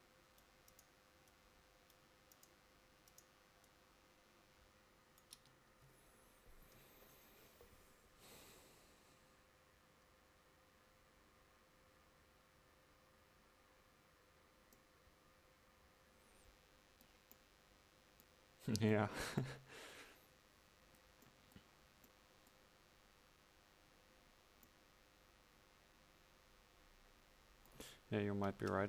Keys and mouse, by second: 5.4 Tab.